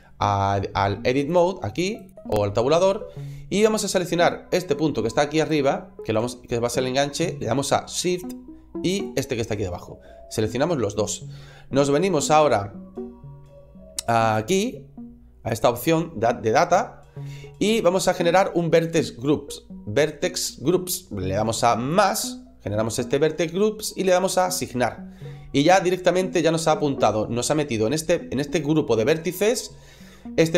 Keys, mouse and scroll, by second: 1.1 Tab, 2.1 click, 2.8 scroll up 2, 5.2 right click, 8.9 shift+right click, 9.5-11.9 scroll down 2, 15.3 click, 21.7 click, 24.4 click.